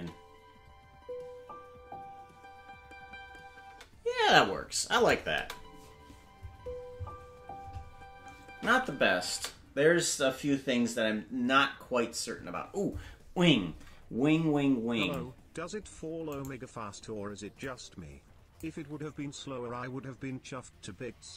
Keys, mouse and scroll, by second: 4.2 space, 4.9 click, 5.3 space, 15.0 click, 16.5 right click, 17.6 click.